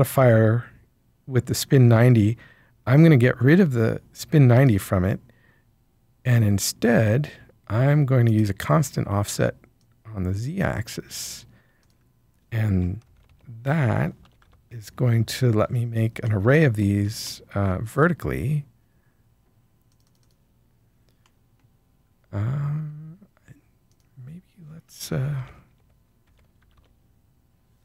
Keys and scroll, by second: 13.0 Tab, 13.2 Tab, 14.2 BackSpace, 14.3 5, 14.4 Return, 25.1 Tab, 25.7 Tab, 26.2 Tab, 26.6 4, 26.7 Return.